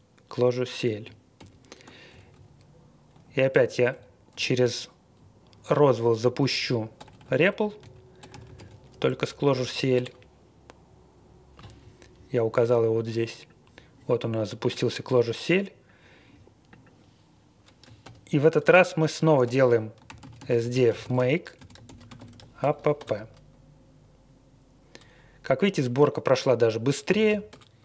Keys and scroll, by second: 1.3 ctrl+l, 2.1 Up, 2.3 Up, 3.1 Up, 3.5 Up, 3.9 Down, 4.3 Up, 4.5-4.9 Left, 4.9 Up, 4.9 Down, 4.9 Left, 5.0 Left, 5.0 Left, 5.0 Left, 5.1 Left, 5.1-6.9 Left, 5.8-6.9 Right, 6.9-9.0 typing, 9.2 Right, 9.5 Right, 9.7 Right, 9.9 Return, 11.5 Tab, 18.0-22.9 typing, 27.0 typing, 27.4 Return.